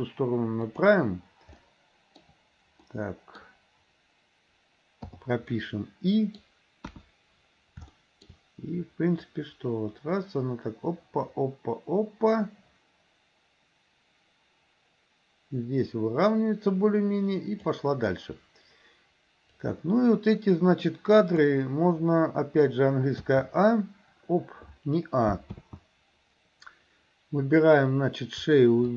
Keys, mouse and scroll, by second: 1.7-2.3 middle drag, 2.9 scroll up 1, 3.0 middle click, 5.5-6.5 middle drag, 6.9 KP_1, 8.0 shift+middle drag, 9.4-17.9 drag, 19.7-21.5 drag, 23.4 a, 25.7 ctrl+z.